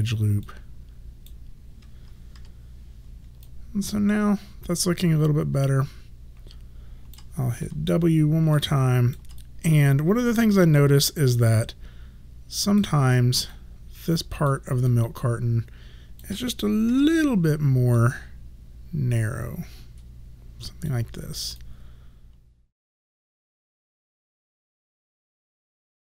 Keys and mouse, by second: 0.5 click, 2.4 3, 3.5 alt+click, 7.7 w, 8.6 alt+click, 9.5 right click, 13.6 click, 14.9 alt+click, 18.1 click, 21.7 alt+click.